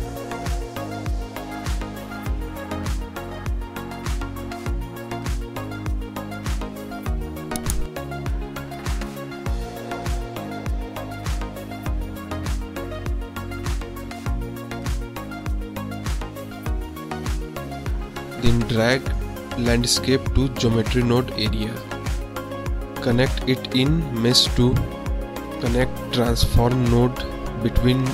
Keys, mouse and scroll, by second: 2.8-4.5 drag, 5.4-6.5 drag, 7.3 click, 9.7 click, 10.5 click, 11.2 shift+a, 16.6 middle click, 17.0 middle click, 18.8-19.8 drag, 20.3 middle click, 21.3-22.2 drag, 22.9-23.4 middle drag, 24.8 middle click, 25.8 shift+a.